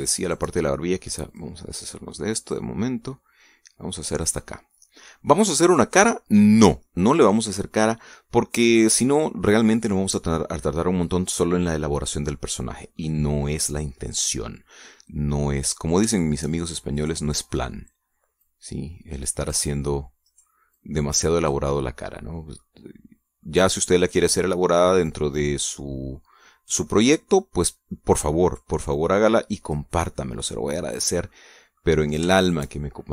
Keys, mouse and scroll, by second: 0.5 right click, 1.1 shift+right click, 2.2 click, 3.4-5.2 drag, 5.3-8.8 middle drag, 9.0 scroll down 1, 9.4 middle click, 13.4 scroll down 1, 13.8-16.5 middle drag, 16.6 scroll up 1, 17.0 shift+middle click, 17.8 right click, 18.1 click, 19.3-20.6 drag, 21.1 right click, 21.6 click, 22.6-23.6 middle drag, 23.7 middle click, 24.9 right click, 25.3 middle click, 26.2-28.3 drag, 28.5 middle click, 29.3 right click, 29.8 click, 30.8-31.8 middle drag, 32.2 middle click, 32.9 shift+right click.